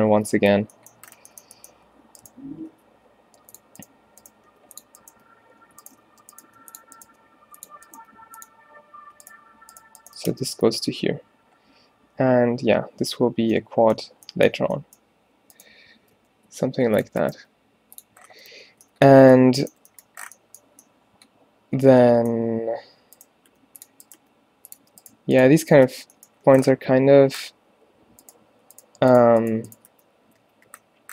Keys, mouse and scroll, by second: 0.2 Tab, 0.6 Tab, 1.6 click, 2.8 v, 4.6 g, 4.8 click, 5.2 g, 6.1 shift+Tab, 6.5 g, 8.0 g, 10.4 f, 11.0 a, 16.2 g, 17.4 g, 18.4 a, 18.6 a, 19.4 a, 21.2 middle click, 23.5 g, 24.2 g, 25.9 f, 26.6 a, 26.8 a, 30.0 f, 30.5 a, 30.7 a.